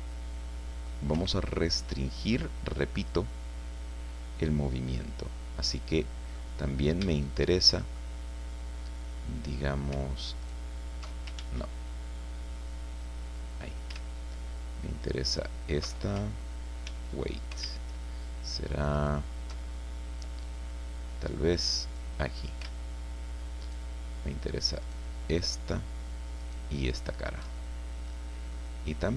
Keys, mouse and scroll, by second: 1.1 Escape, 1.5-2.5 drag, 2.6-3.0 scroll down 1, 3.2-4.4 drag, 4.4-6.5 middle drag, 6.5-7.2 scroll up 1, 7.2 shift+middle click, 8.1-8.7 shift+scroll up 1, 10.4 alt+shift+right click, 11.4 ctrl+alt+shift+z, 13.2 click, 15.3 alt+shift+right click, 16.8 ctrl+z, 18.4 alt+right click, 18.9 alt+right click, 19.7 alt+scroll up 2, 20.4-20.7 scroll down 2, 21.9 click, 23.6 alt+shift+right click, 24.8 alt+shift+right click, 26.4 alt+shift+right click, 27.8-28.2 alt+shift+scroll down 3, 28.5 click.